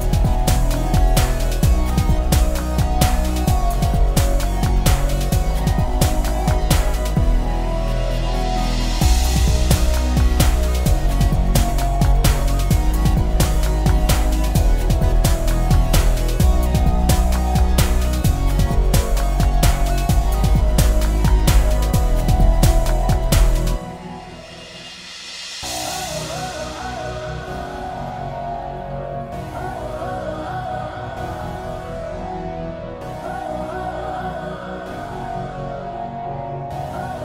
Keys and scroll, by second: 35.9-37.2 ctrl+space.